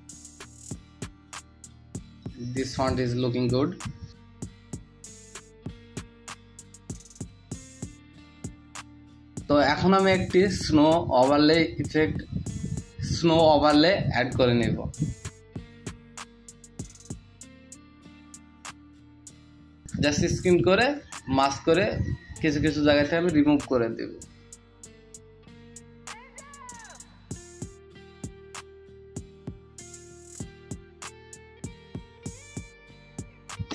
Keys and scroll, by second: 3.3 ctrl+alt+t, 6.0 Return, 6.3 shift+space, 6.6 shift+1, 9.3 v, 9.5 space, 9.5 space, 12.0 ctrl+s, 19.7 Return, 22.2 space, 22.7 space, 23.2 space, 26.3-32.8 typing, 33.5 ctrl+s.